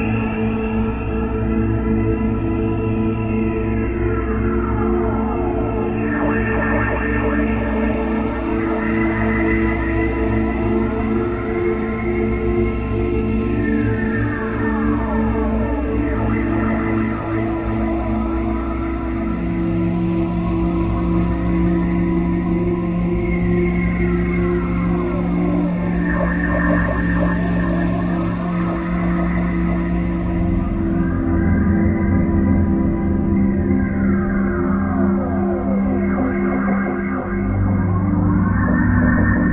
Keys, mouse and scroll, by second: 0.9 click, 13.5 click, 14.5 click, 18.2 click, 29.7 Escape, 31.2 click, 33.1 click, 36.3 click.